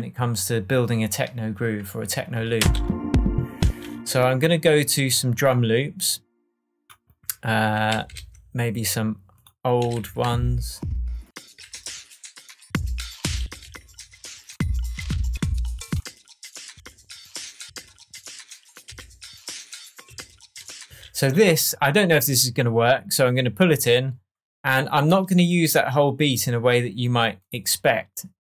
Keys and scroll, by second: 2.5 space, 7.6 Up, 7.8 Down, 8.1 Right, 9.7 Up, 9.9 Right, 10.2 Down, 12.6 Down, 13.3 Up, 15.2 Up, 16.7 Up, 17.6 Down, 18.8 Up, 20.0 Down, 20.8 space.